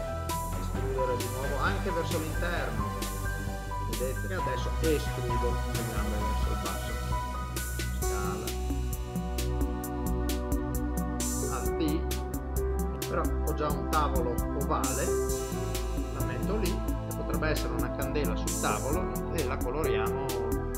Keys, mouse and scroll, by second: 0.7 e, 2.7 middle click, 3.8 ctrl+middle click, 4.5 e, 6.9 middle click, 8.3 s, 9.6 alt+d, 11.5 alt+d, 12.9 middle click, 15.4 Tab, 16.1 g, 16.6 middle click, 19.1 click.